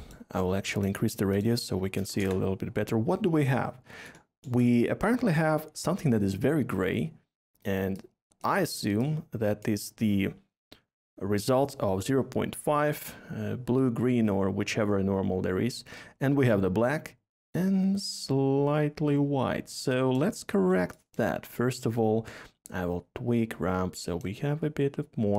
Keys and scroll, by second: 1.9 BackSpace, 2.1 BackSpace, 2.1 Return.